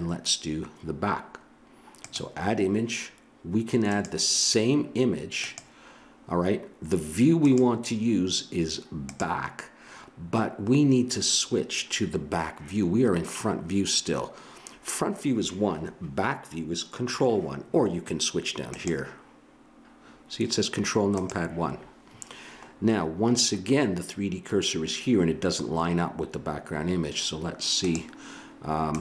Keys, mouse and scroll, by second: 2.0-5.8 drag, 7.4-9.4 drag.